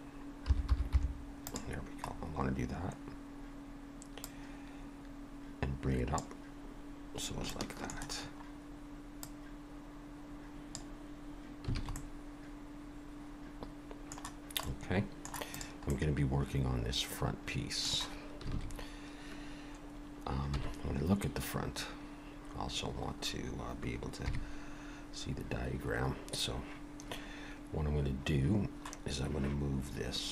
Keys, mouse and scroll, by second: 2.1-4.2 scroll down 3, 4.2 click, 4.2-5.2 scroll down 1, 7.5 shift+middle click, 8.2-9.2 scroll up 1, 9.2 click, 11.8 alt+a, 12.0 middle click, 14.6 middle click, 15.5 click, 15.9 middle click, 18.5 alt+a, 20.5 KP_1, 24.3 KP_3, 30.2-30.3 scroll down 1.